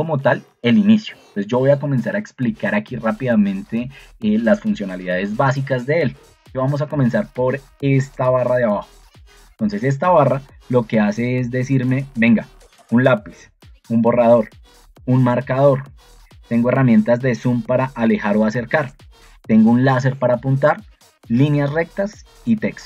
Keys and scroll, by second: 6.6 ctrl+2.